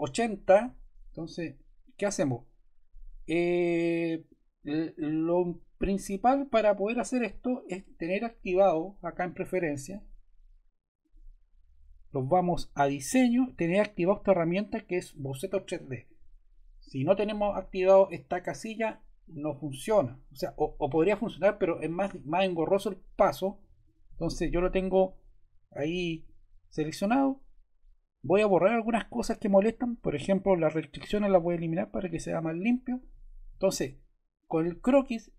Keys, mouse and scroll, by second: 10.9-12.2 drag, 23.9 click.